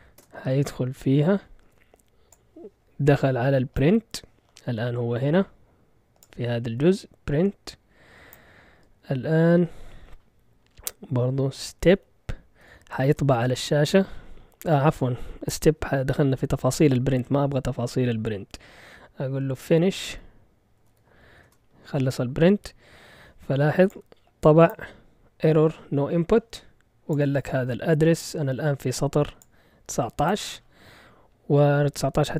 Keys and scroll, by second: 0.2 Return, 11.3-13.1 typing, 19.4-21.4 typing, 21.4 Return.